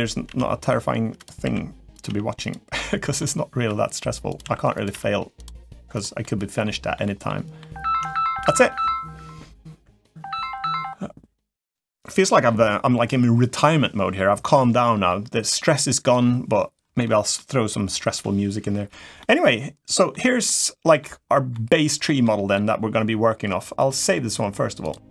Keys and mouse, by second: 0.0 g, 1.8 g, 1.8 s, 2.6 middle click, 3.3 e, 4.2 s, 4.7 g, 5.7 click, 6.0 middle click, 6.7 middle click, 7.0 middle click, 14.8 middle click, 16.8 middle click, 19.0 middle click, 20.2 middle click, 21.3 middle click, 22.0 middle click, 24.7-25.1 drag.